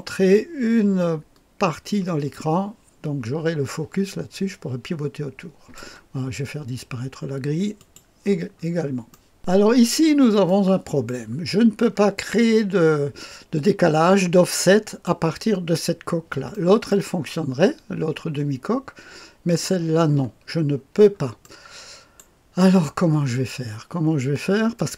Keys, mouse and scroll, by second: 1.7 middle click, 2.3-5.8 drag, 7.7 click, 8.5-9.3 scroll up 1, 9.1 middle click, 9.9-10.4 scroll up 2, 10.4 middle click, 11.1 right click, 11.5-12.3 scroll down 1, 12.3-15.3 drag, 16.5 right click, 17.3 click, 20.8-21.4 scroll up 1, 21.4 click, 21.4-22.1 scroll up 1, 22.1 middle click, 23.6-24.9 scroll down 2.